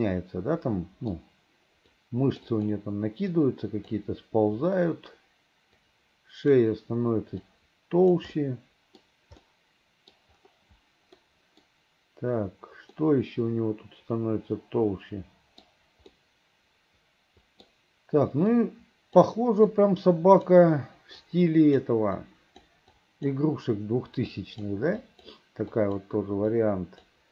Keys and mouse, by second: 0.1-1.2 middle drag, 2.1 click, 3.4 click, 5.9 click, 7.6 click, 8.5 middle click, 9.6 middle click, 11.3 middle click, 13.1-15.8 middle drag, 16.2-17.8 middle drag, 18.6 click, 19.8 click, 21.3 click, 22.3 click, 23.1 click, 24.4 click, 25.1 click, 25.8 click, 26.6 click.